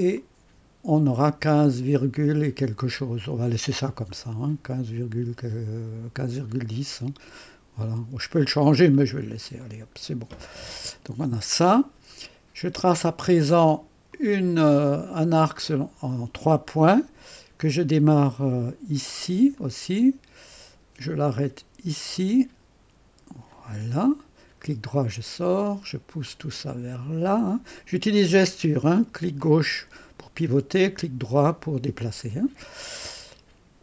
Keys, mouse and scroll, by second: 0.4-1.5 drag, 4.1-6.1 scroll up 1, 6.1-6.8 scroll up 1, 9.0-9.7 scroll down 2, 9.7-10.7 right drag, 10.6-11.3 scroll down 2, 14.1 click, 15.7 click, 19.6 click, 22.2 click, 23.5 click, 24.7-27.6 drag, 29.4-30.6 drag, 32.9 right click.